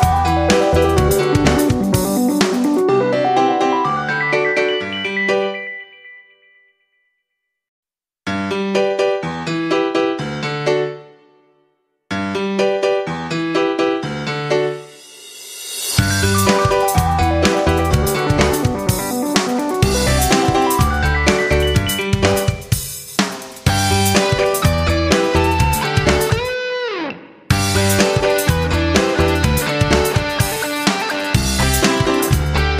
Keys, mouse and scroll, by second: 1.3 F9, 2.2 shift+click, 3.3 shift+click, 8.3-12.2 shift+drag, 12.6 ctrl+g, 13.5 click, 15.2-17.9 drag, 17.9 F9, 18.3 click, 19.4 ctrl+shift+g, 20.4 click, 28.5 shift+click, 29.8 shift+Up, 29.9 shift+Up, 30.0 shift+Up, 30.1 shift+Up, 32.6 Down.